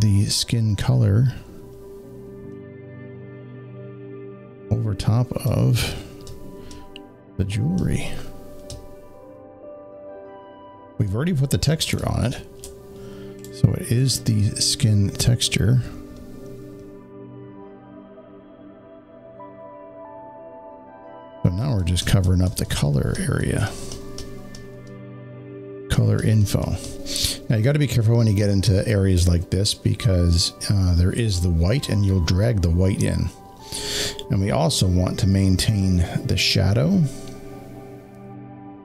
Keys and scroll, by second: 11.8 space, 11.9 space.